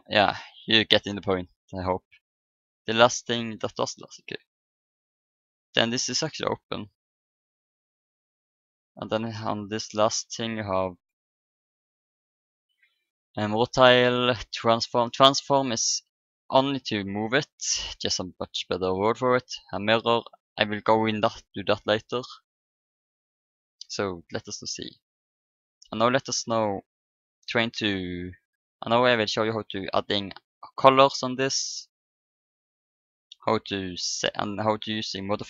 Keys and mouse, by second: 0.3 n, 2.5-7.9 drag, 8.0 click, 8.8-13.5 drag, 15.9-17.9 drag, 22.7-24.8 drag, 26.9-30.1 middle drag.